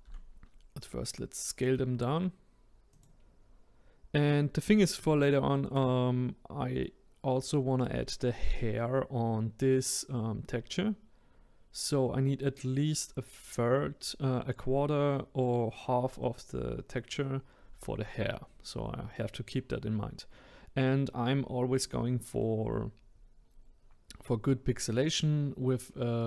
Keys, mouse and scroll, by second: 0.0 s, 5.0 shift+middle click, 5.9-6.8 scroll up 1, 6.8-8.3 scroll down 1, 21.8-24.8 middle drag.